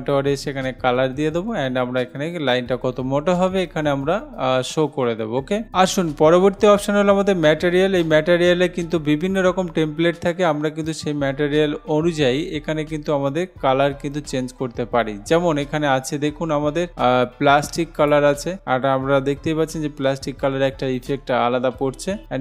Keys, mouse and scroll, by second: 9.5 click, 18.2 click, 21.2 click.